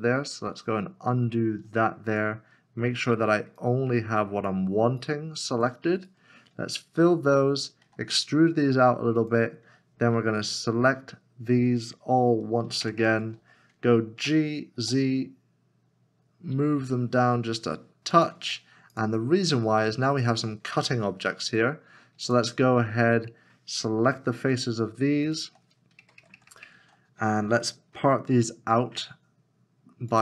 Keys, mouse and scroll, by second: 6.0 right click, 7.0 f, 7.8 e, 12.8 ctrl+KP_Add, 13.0 ctrl+KP_Add, 13.1 ctrl+KP_Add, 14.2 g, 14.8 z, 22.3 ctrl+click, 24.0 3, 25.3 shift+l, 25.3 shift+click, 26.2 ctrl+KP_Add, 26.3 ctrl+KP_Add, 26.5 ctrl+KP_Add, 26.6 ctrl+KP_Add, 27.9 p.